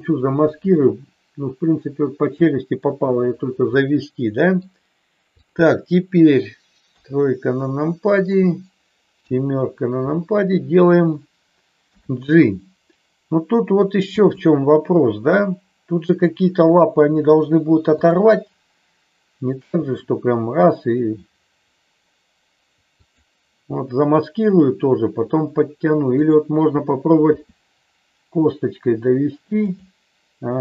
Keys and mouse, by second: 0.8-2.9 middle drag, 3.7 middle click, 5.4 click, 6.8 KP_3, 9.2 KP_7, 11.9 g, 14.2 click, 15.3 r, 17.9 click, 19.8 g, 23.0 click, 26.0 click, 27.2 r, 29.7 click.